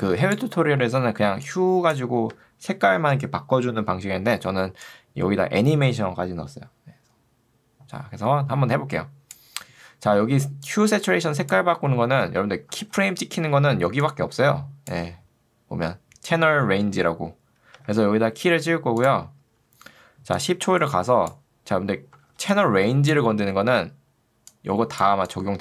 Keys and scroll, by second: 1.3 ctrl+2, 2.3 Escape, 10.3 ctrl+2, 12.3 Escape, 12.9 ctrl+2, 17.7 Escape, 22.3 ctrl+2.